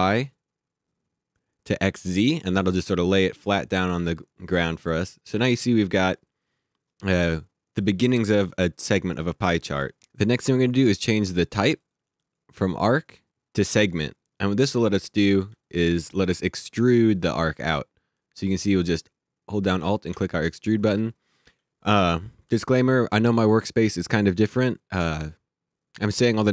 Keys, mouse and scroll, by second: 3.8 alt+Num_Lock, 3.9 alt+click, 11.8 click, 14.8 click, 15.6 alt+click, 17.5 click, 19.6 alt+click.